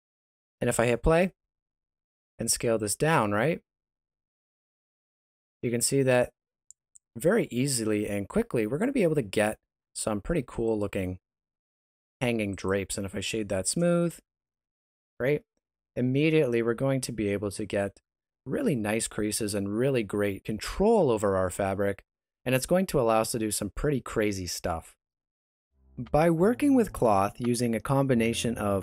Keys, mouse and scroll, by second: 1.3 space, 2.0 s, 7.6 middle click, 10.0 space, 10.6 right click, 12.0 w, 13.1 shift+middle click, 14.0-14.5 scroll up 2, 14.5 middle click, 18.0-20.5 scroll down 1.